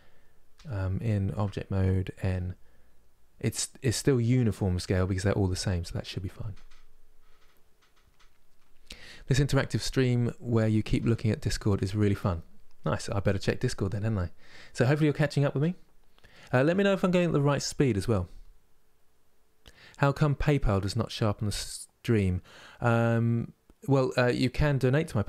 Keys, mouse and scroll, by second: 0.2 n, 1.0 Tab, 1.9 n, 14.7 middle click, 15.4 scroll down 2, 16.0-25.2 middle drag.